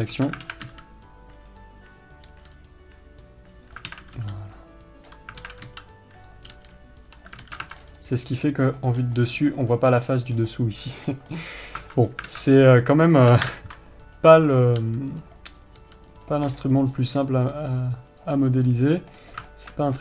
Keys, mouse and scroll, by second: 8.6-15.1 middle drag, 18.9-20.0 middle drag.